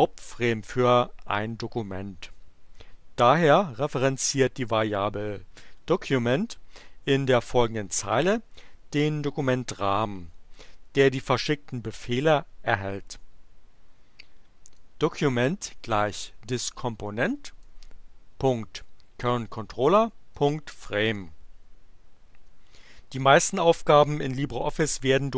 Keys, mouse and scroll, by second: 14.8-17.8 drag, 20.3 click.